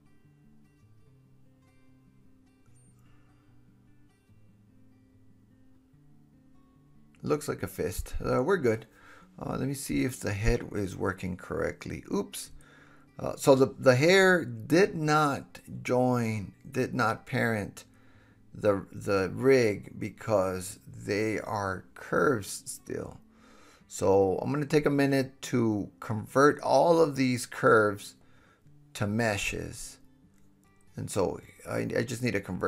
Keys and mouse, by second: 0.5 middle click, 0.9 middle click, 1.8 click, 2.7-4.8 middle drag, 6.3-7.5 super+z, 7.5-8.0 super+middle drag, 8.1 middle click, 8.6 middle click, 8.6-11.8 middle drag, 11.8-14.5 drag, 13.5 super+z, 14.5-16.0 middle drag, 15.1 h, 16.0-20.2 drag, 16.9 h, 19.3 h, 20.2-20.7 middle drag, 20.4 h, 20.7 click, 21.0-24.0 middle drag, 23.4 g, 24.0 super+z, 24.5 middle drag, 24.7-30.1 drag, 29.6 h, 30.1-31.1 middle drag, 31.1 shift+click, 31.2 middle click, 31.6-32.6 drag.